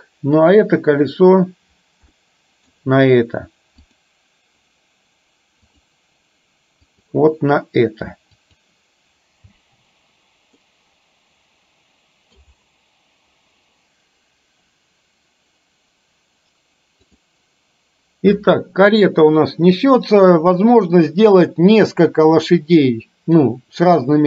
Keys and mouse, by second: 0.6 click, 2.2-2.8 middle drag, 3.9-5.8 drag, 6.9 click, 9.6 space, 10.6-12.4 middle drag.